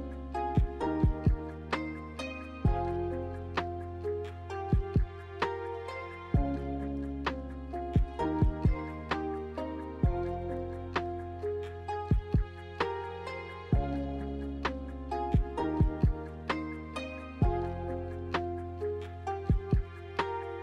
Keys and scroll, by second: 1.0-3.6 typing, 6.0 ctrl+h, 7.2-9.4 typing, 10.1 ctrl+h, 18.3 w.